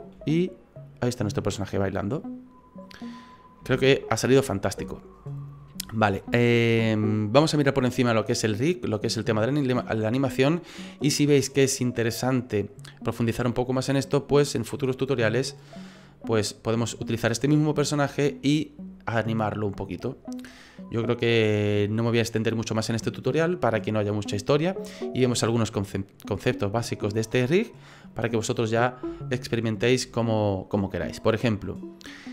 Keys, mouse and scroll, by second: 0.2 g, 3.2-3.7 scroll down 3, 3.7 ctrl+z, 4.1 middle click, 5.9 scroll up 2, 6.4 shift+middle click, 29.3 shift+middle click, 30.1 middle click, 32.1-32.3 scroll down 3.